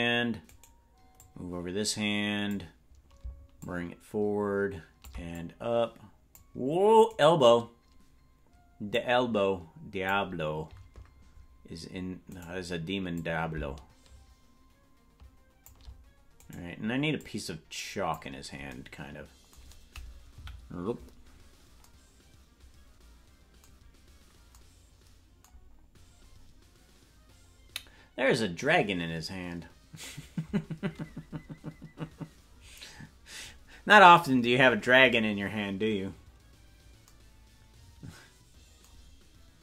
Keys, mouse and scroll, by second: 0.5 right click, 1.1-3.1 drag, 3.6-5.1 shift+drag, 5.3-6.4 drag, 7.1-8.2 right drag, 8.9-10.3 drag, 12.4 right click, 13.1-16.5 drag, 16.5 right click, 17.1-18.3 drag, 20.3 KP_Decimal, 25.7-26.9 scroll up 4, 26.9-29.5 scroll down 1.